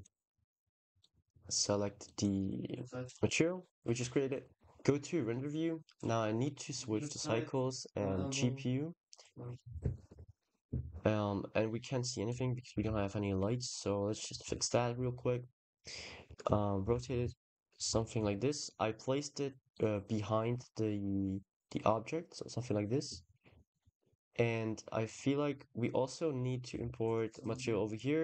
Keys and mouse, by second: 1.4 click, 1.9 click, 3.3 ctrl+s, 4.4 click, 5.4 click, 6.5-7.1 drag, 7.6-9.1 drag, 10.6 shift+a, 12.5 g, 12.7 z, 14.2 r, 14.8 x, 16.2 y, 16.6 shift+9, 16.7 shift+0, 17.2 shift+Return, 17.7 g, 18.1 z, 18.2 t, 20.9 drag, 21.6-22.7 drag, 23.9 middle click, 24.3 middle click, 24.9 click, 26.6 shift+d, 27.1 click.